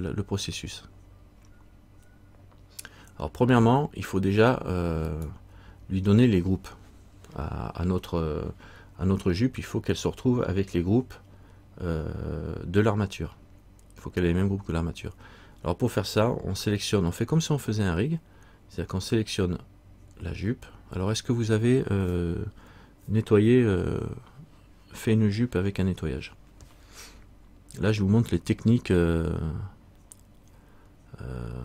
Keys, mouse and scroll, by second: 0.9-1.7 scroll up 1, 2.1-2.5 scroll up 1, 5.3 right click.